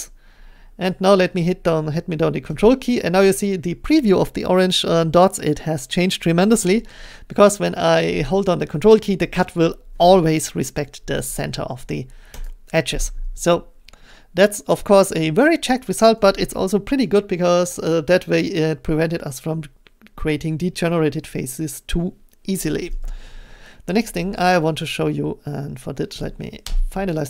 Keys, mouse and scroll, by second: 12.4 ctrl+click, 26.6 Return.